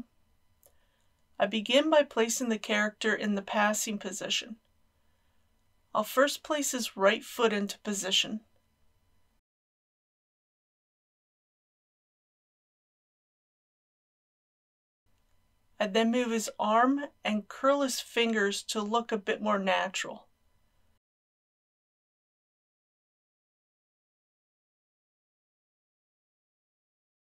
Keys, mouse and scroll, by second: 6.7 middle click, 8.3-9.4 drag, 10.9 KP_1, 11.4 g, 12.7 click, 12.9 r, 14.0 g, 14.1 z, 14.9 r, 15.0 middle click, 17.0 g, 20.4-22.7 drag, 21.1 r, 22.6 r, 22.6 z, 23.4 g, 24.4 middle click, 24.8-26.9 typing, 25.5 click, 26.7 click.